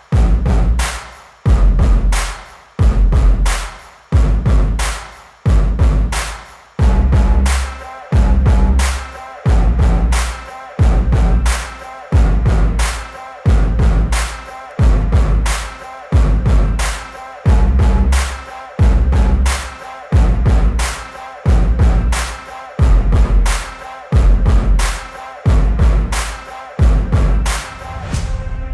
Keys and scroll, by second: 2.5 space, 6.8 space, 15.2 space, 20.4 space, 21.8 ctrl+=, 22.0 space, 25.7 space, 26.5 space.